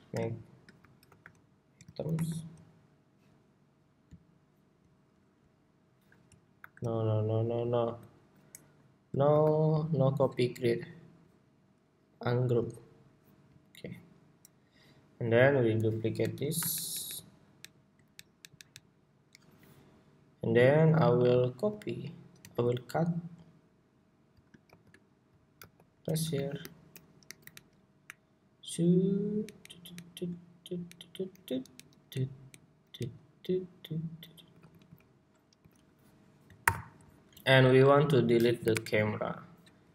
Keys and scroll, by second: 0.8 super+g, 1.8 super+r, 6.3 super+r, 7.3 super+r, 8.3 ↺, 8.9 ↺, 15.9 super+d, 22.1 super+x, 24.4 shift+super+v, 25.3 super+v, 26.6 super+v, 36.4 super+y.